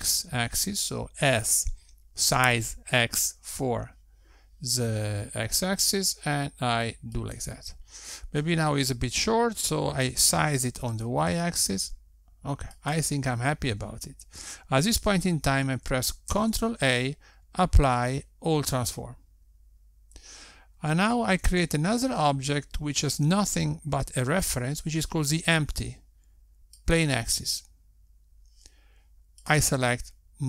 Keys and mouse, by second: 10.8 s, 17.1 ctrl+a, 22.2 shift+a, 30.3 click.